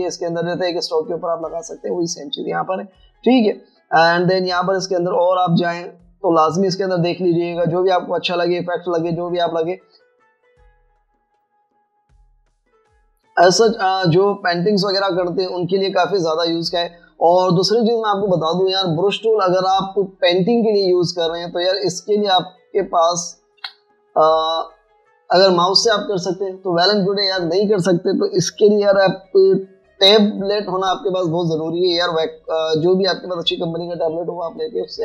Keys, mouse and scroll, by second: 1.0 typing, 6.1 double click, 21.6 v, 24.6 v.